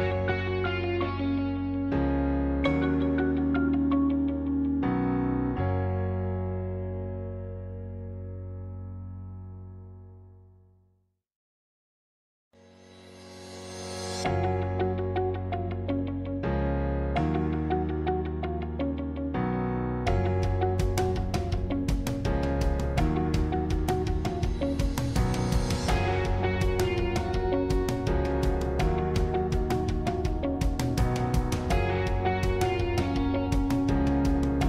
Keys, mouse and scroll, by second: 0.2 g, 2.3 click, 2.9-7.3 middle drag, 7.3 click, 9.4 click, 10.0-11.6 middle drag, 11.6 scroll down 1, 11.9-14.6 middle drag, 14.6 g, 17.3-20.2 middle drag, 20.2 r, 23.1 middle click, 24.0-24.4 scroll up 1, 24.4 middle click, 25.3-25.7 scroll up 2, 25.7-28.2 middle drag, 28.2 Tab, 29.9 click, 30.8-34.6 middle drag.